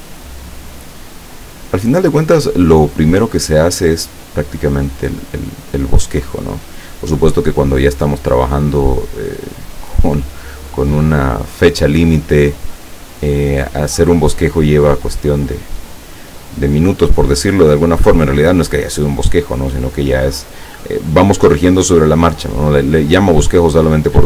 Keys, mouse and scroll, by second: 0.1-1.6 drag, 2.8-5.5 drag, 7.7 click, 8.3-10.3 drag, 11.7-13.8 drag, 15.1-16.4 drag, 17.4-18.6 drag, 19.2 click, 20.8-22.8 drag, 23.5-24.2 drag.